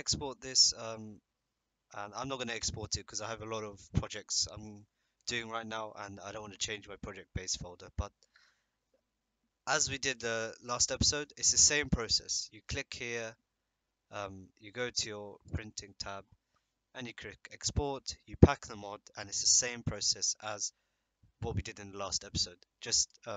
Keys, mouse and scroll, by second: 13.1 click, 15.5 click, 23.0 click.